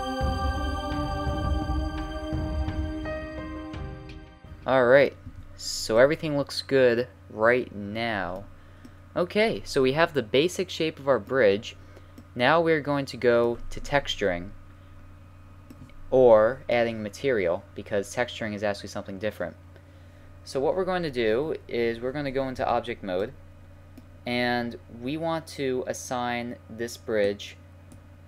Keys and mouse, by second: 0.0-2.7 typing, 0.8 click, 1.2 click, 1.6 click, 2.4 click, 2.6 right click, 3.1 middle click, 3.7 right click, 3.9 e, 5.3 a, 9.1-11.0 middle drag, 11.7-12.8 middle drag, 14.0-17.9 middle drag, 22.6 Tab, 23.2-23.6 middle drag, 27.2-28.2 drag.